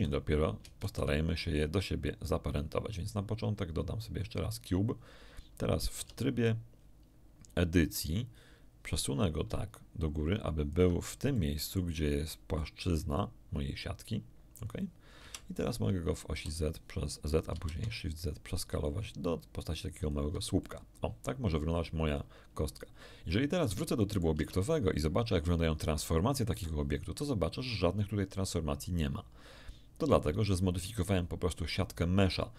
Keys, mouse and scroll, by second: 0.0 click, 0.8 shift+a, 4.2 click, 5.9 Tab, 8.0-8.3 scroll up 1, 9.4-10.9 ctrl+drag, 11.3 ctrl+middle click, 12.6-14.8 middle drag, 15.2 KP_1, 16.3 s, 17.5 shift+z, 20.0 ctrl+click, 20.6-23.8 ctrl+middle drag, 24.0 click, 24.3 Tab, 26.5 n.